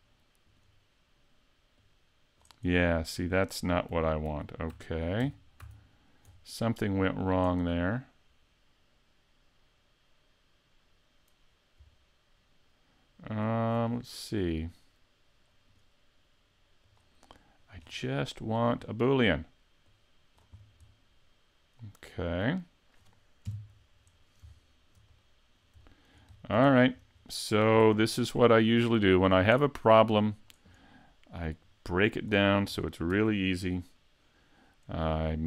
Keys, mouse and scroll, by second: 0.5 right click, 1.8 click, 2.7 middle click, 4.3 super+z, 4.7 super+z, 5.2 super+z, 5.6 super+z, 6.3-6.8 scroll down 3, 6.8 middle click, 13.8 right click, 15.7 right click, 16.9 click, 17.3 middle click, 17.8-18.5 scroll up 1, 18.5 right click, 18.5-18.8 scroll up 5, 18.8 scroll down 4, 19.9 click, 20.6 scroll down 2, 20.9 middle click, 23.5 KP_5, 24.2 scroll down 2, 24.6 shift+middle click, 25.2 middle click, 25.9 shift+middle click, 26.3-26.7 scroll down 2, 26.7 shift+middle click, 27.2-27.7 scroll down 1, 27.8 s, 29.3 click, 30.3 click, 31.7 click, 33.1 shift+c.